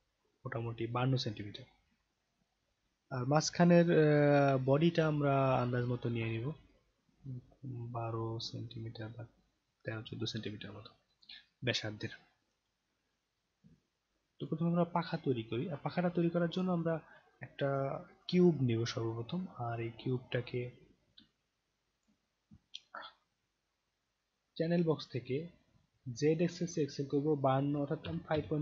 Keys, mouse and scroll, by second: 14.4 click, 16.5 click, 18.8 scroll down 1, 18.9 scroll up 5, 19.5 scroll down 1, 20.2 scroll down 1, 21.3-22.0 alt+drag, 26.6 click.